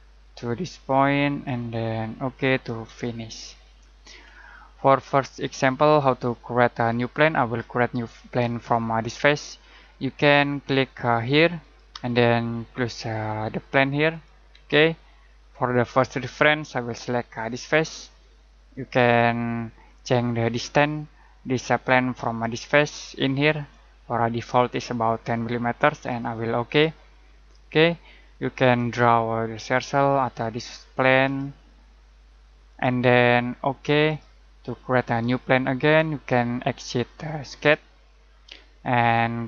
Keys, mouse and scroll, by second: 3.4 scroll down 1, 3.7 scroll up 1, 11.6 click, 14.1 click, 17.5 click, 19.8 middle click, 23.7 click, 31.3 click, 37.5 click.